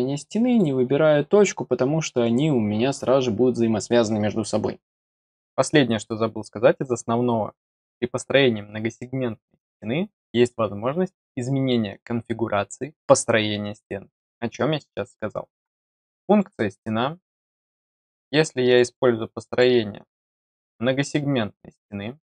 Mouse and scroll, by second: 0.5 click, 16.2 click, 17.7 click, 18.7 click, 18.8 click, 19.3 click, 19.5 click, 19.9 click.